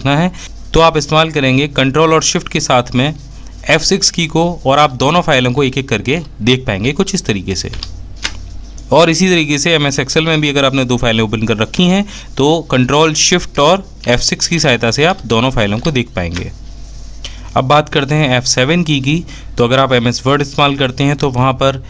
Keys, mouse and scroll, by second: 17.3-17.9 typing.